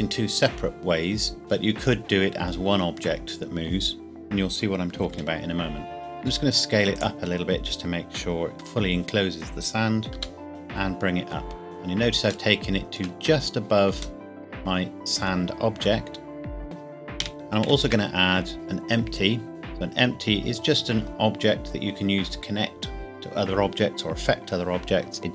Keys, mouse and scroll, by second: 5.1 KP_5, 6.0 scroll down 1, 6.2 s, 6.9-7.2 scroll down 1, 10.1 g, 10.5 z, 11.6-12.1 scroll up 1, 12.5 shift+middle click, 13.2 scroll up 1, 14.2 middle click, 14.5 middle click, 17.2 KP_1, 17.3 click, 17.6 shift+a.